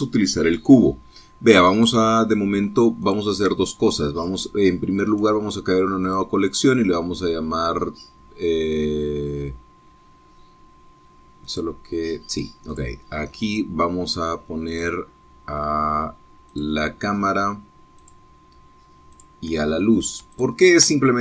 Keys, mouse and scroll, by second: 2.7 click, 3.9 shift+click, 6.0 right click, 7.0 right click, 7.3-9.9 middle drag, 12.4 right click, 13.7 right click, 15.7 right click, 17.5 right click, 18.9 click, 20.1 click.